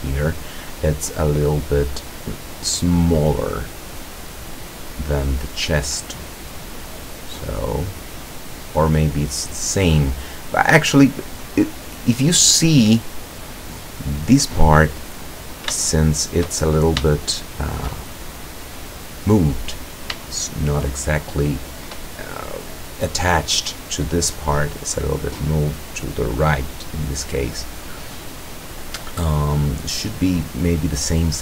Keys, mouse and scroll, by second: 6.4-8.4 drag, 8.8 click, 9.8 click, 11.3 scroll down 1, 11.8-12.3 scroll up 1, 12.3-12.9 scroll up 1, 15.8 shift+click, 17.1 shift+click, 18.1 shift+scroll down 1, 19.4-20.2 scroll up 1, 20.3 shift+middle click, 21.1-21.9 shift+middle drag.